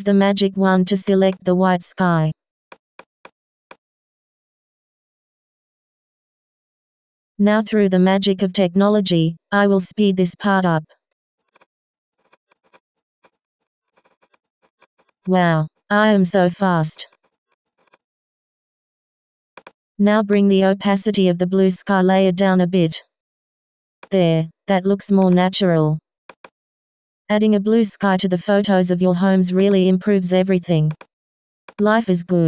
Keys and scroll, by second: 0.7 b, 16.9 x.